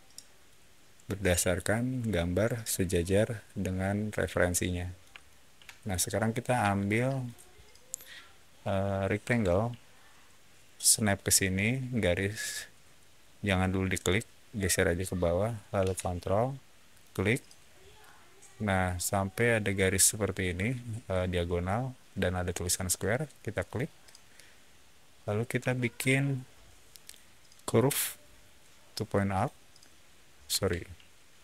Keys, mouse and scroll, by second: 2.0-4.9 alt+middle drag, 5.1 shift+middle click, 6.5 space, 7.1 click, 9.2 r, 13.1 middle click, 16.9 ctrl+click, 23.5 ctrl+click, 24.3-25.1 scroll up 3, 25.5 a, 25.8 scroll up 1, 26.9 click, 29.2 click, 30.4 Escape.